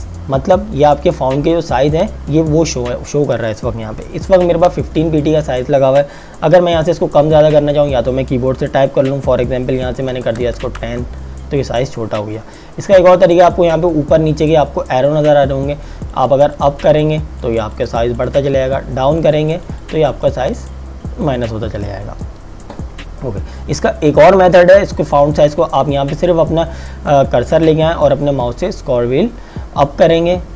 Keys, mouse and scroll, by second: 2.1 click, 10.3 KP_1, 10.4 KP_0, 10.9 KP_Enter, 16.3 click, 28.0-30.5 scroll up 1.